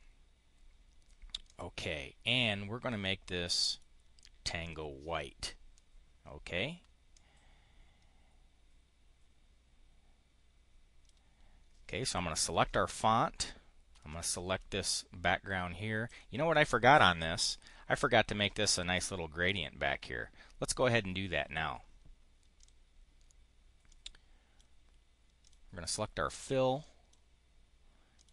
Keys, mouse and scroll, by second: 1.3 click, 3.6 click, 4.5 click, 7.0-11.0 drag, 14.0 shift+click, 16.0 click, 17.2 click, 19.4 click, 22.5 click, 23.8 click, 25.3 click, 26.7 click, 28.0 click.